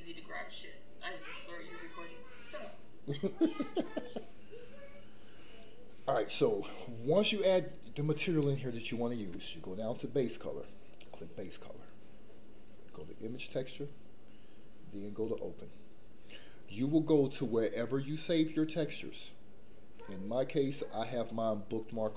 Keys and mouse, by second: 11.0-13.5 drag.